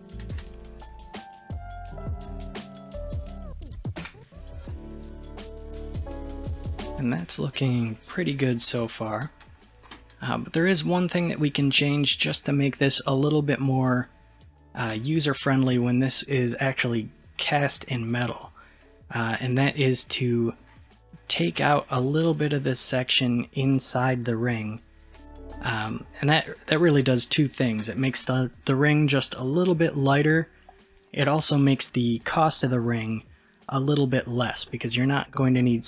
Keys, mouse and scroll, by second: 0.1 click, 0.4-1.9 middle drag, 1.9-2.3 scroll down 4, 2.3-4.1 middle drag, 4.1 Tab, 4.4 click, 4.7-7.7 middle drag, 8.4-9.0 scroll up 4, 9.0-10.0 scroll down 2, 10.0 middle click, 11.0-14.0 middle drag, 14.9-17.2 middle drag, 20.7-23.7 scroll down 1, 25.2-30.9 middle drag, 30.9-33.7 scroll down 1, 34.7 scroll up 1, 34.7-35.3 middle drag.